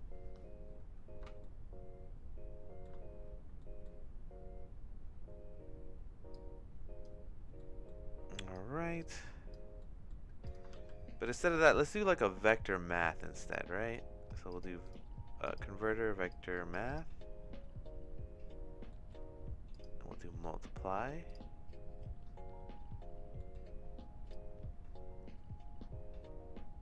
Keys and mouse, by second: 1.4-2.8 shift+middle drag, 3.6 middle click, 6.3 click, 7.7 middle click, 8.3 click, 9.0 click, 9.9 middle click, 10.4 click, 10.7 shift+s, 18.9 middle click, 19.7-21.4 drag, 23.5 middle click, 24.3-26.8 drag.